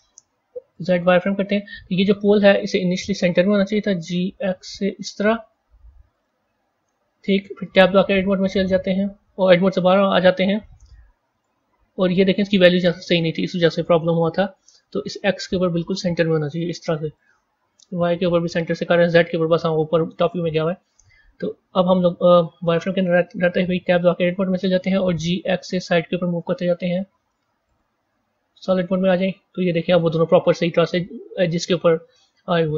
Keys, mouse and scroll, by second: 0.1 z, 1.1-2.4 scroll up 7, 2.4-3.5 scroll down 1, 3.7 g, 6.5 scroll down 2, 7.7 Tab, 11.2 click, 13.0-16.1 drag, 17.0-20.2 drag, 21.2 z, 23.8 Tab, 25.0 g, 28.0 z, 29.0-32.7 middle drag.